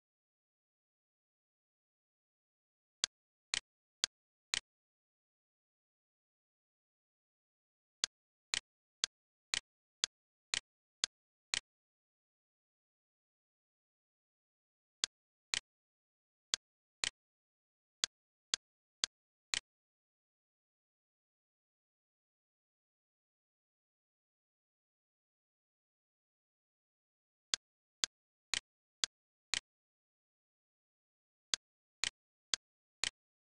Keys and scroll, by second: 0.0-1.7 typing, 6.0 l, 13.0 l, 17.3 d, 20.8-21.7 typing, 22.1 Return, 24.2-25.7 typing, 26.1 Return, 29.8 Return, 31.0 d.